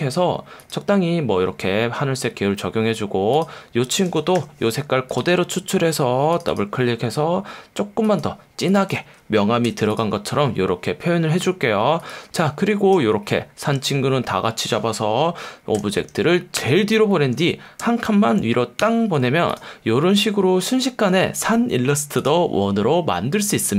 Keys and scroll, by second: 4.4 i, 9.6 v, 16.5 shift+super+[, 18.8 super+].